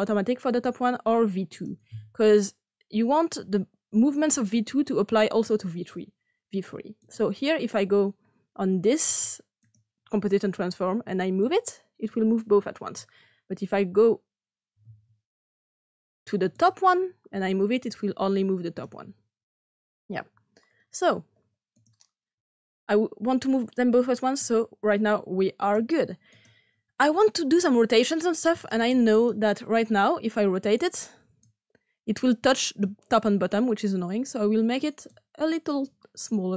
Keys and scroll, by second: 15.5 ctrl+z, 19.5 ctrl+z.